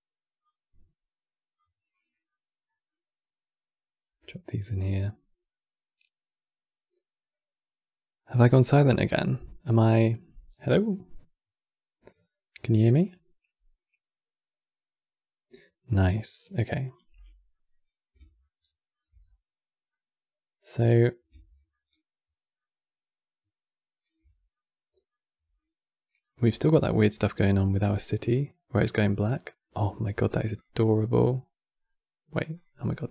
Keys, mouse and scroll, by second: 0.1 drag, 3.6-6.7 middle drag, 16.9 middle click, 17.5 scroll down 2, 18.1-18.9 shift+middle drag, 18.9 scroll up 5, 19.6-29.4 middle drag.